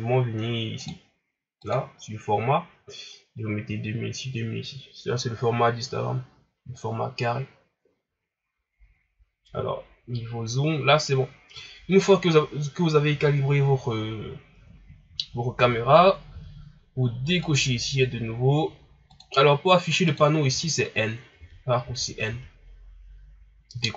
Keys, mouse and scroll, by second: 6.1-6.7 scroll up 1, 6.7-7.9 scroll up 1, 7.9-8.5 scroll up 1, 8.5-10.8 scroll down 1, 16.2 n, 17.3-20.4 drag, 20.4 n, 21.3 n, 21.8 n, 22.2 n.